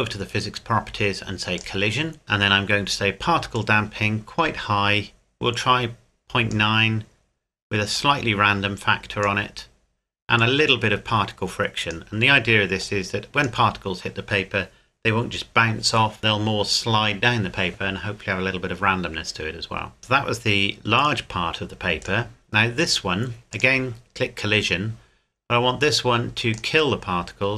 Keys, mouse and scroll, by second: 1.6 click, 2.2-3.5 scroll up 1, 3.5 click, 19.6-20.0 scroll up 1, 21.0 click, 22.0 right click, 23.5 click, 26.5 click.